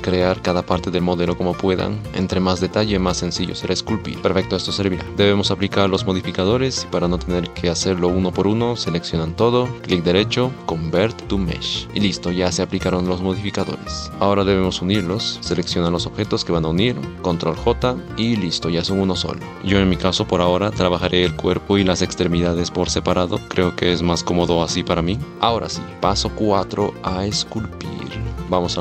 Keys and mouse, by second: 0.3 shift+d, 0.3 r, 1.1 s, 1.3 g, 2.6 r, 3.4 shift+d, 3.8 r, 4.2-11.9 middle drag, 11.9 g, 12.4 g, 17.5 ctrl+j, 18.1 g, 21.1 g, 22.7 g.